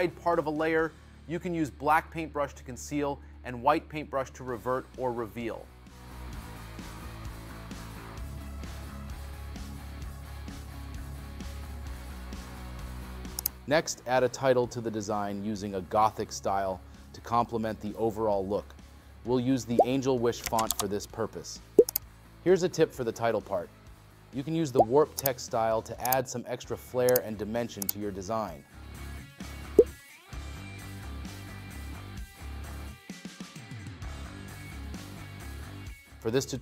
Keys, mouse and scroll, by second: 31.2 scroll, 32.5-32.9 scroll.